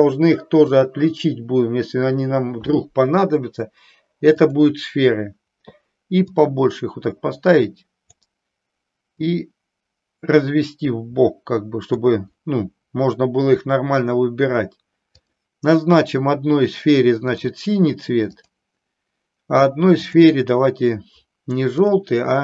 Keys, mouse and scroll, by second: 4.5 click, 6.3-8.3 drag, 9.2-12.0 drag, 17.4 click, 18.2 click, 21.9 click.